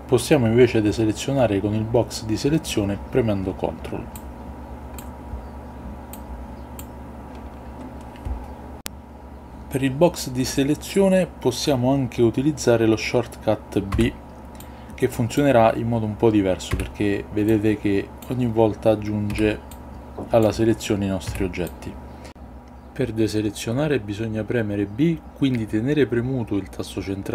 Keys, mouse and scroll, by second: 4.1-5.1 ctrl+drag, 6.1-6.9 ctrl+drag, 13.9 b, 16.7 b, 19.3 b, 21.2 b, 24.9 b.